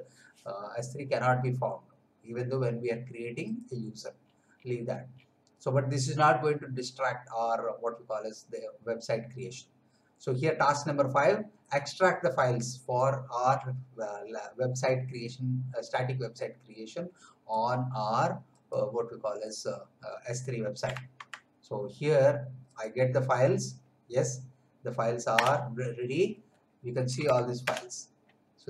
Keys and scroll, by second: 21.1 alt+Tab, 25.3 Return, 27.0 l, 27.6 Return.